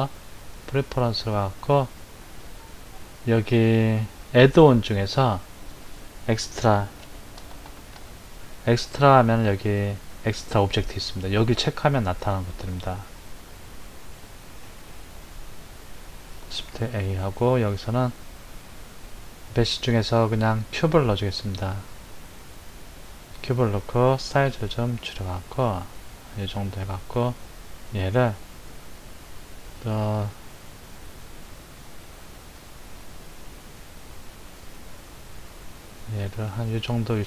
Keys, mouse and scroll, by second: 16.5 shift+a, 24.5 s, 29.7 g.